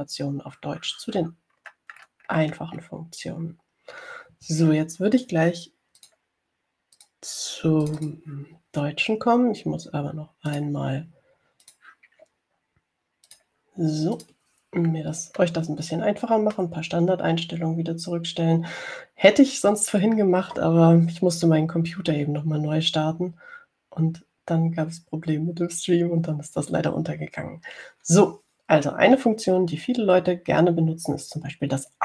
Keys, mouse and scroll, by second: 2.8-4.0 scroll down 4, 7.2 click, 8.2 click, 9.1 click, 11.7 click, 12.9 click, 14.6 click, 15.5 click, 16.7-18.0 middle drag.